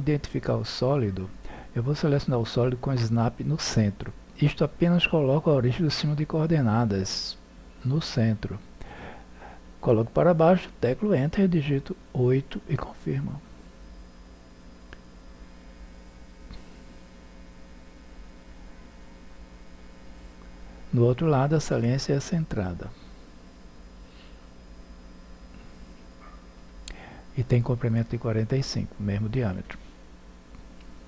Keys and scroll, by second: 10.2 Return, 11.6 8.